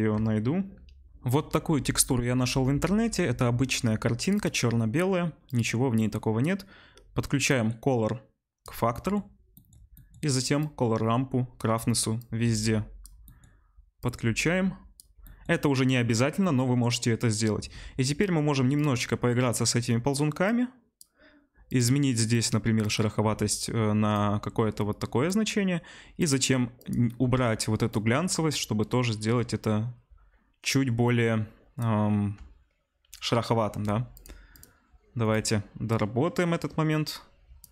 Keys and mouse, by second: 4.5-5.5 middle drag, 5.5 click, 5.5-7.4 middle drag, 7.4-22.9 drag, 22.9-26.2 middle drag, 26.2-26.9 drag, 26.9-34.1 middle drag, 34.1 click, 34.6-37.7 middle drag.